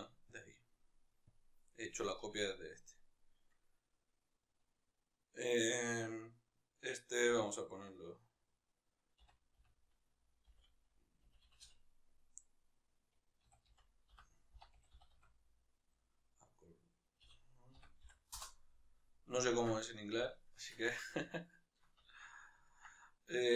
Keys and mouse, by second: 1.3 click, 2.9-18.4 right drag, 19.2-23.5 ctrl+middle drag.